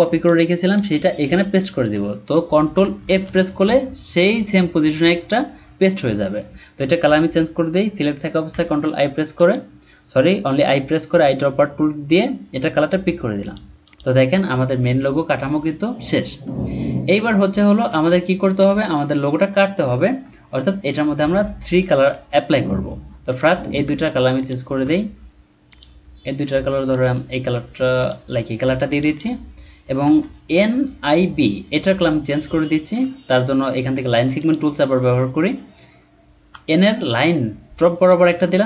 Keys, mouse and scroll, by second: 0.7 BackSpace, 3.1 ctrl+f, 8.5 i, 13.8 double click, 17.5 alt+scroll down 1, 20.0-20.4 ctrl+scroll down 1, 21.9-22.3 ctrl+scroll up 1, 24.3 shift+click, 29.1 double click, 29.9-30.3 alt+scroll up 1, 32.7-33.1 ctrl+scroll up 1, 36.6 shift+click.